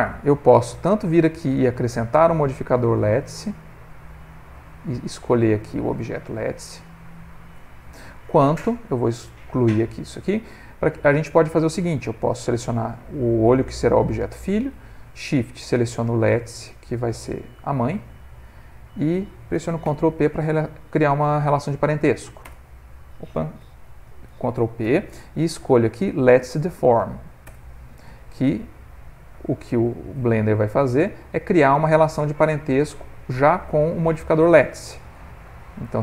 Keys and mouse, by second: 0.6 click, 1.8 click, 5.4 click, 8.8 click, 10.3 middle click, 12.4 click, 13.0 click, 13.8 middle click, 15.6 shift+click, 16.1 middle click, 16.7 middle click, 17.9 shift+click, 18.4 middle click, 19.8 ctrl+p, 23.7 ctrl+z, 24.8 ctrl+p, 25.7 Down, 25.8 Down, 28.8 middle click, 29.2 middle click, 29.5 ctrl+middle click, 29.8 middle click, 34.6 click, 35.8 click.